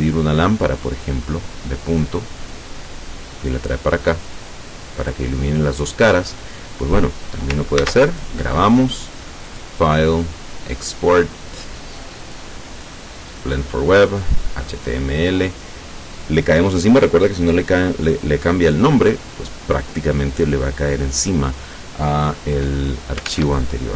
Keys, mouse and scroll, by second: 1.1 click, 2.7-5.4 drag, 7.9 ctrl+s, 8.3 ctrl+click, 9.7 click, 12.3 click, 13.5 click, 14.9 click, 23.4 alt+Tab.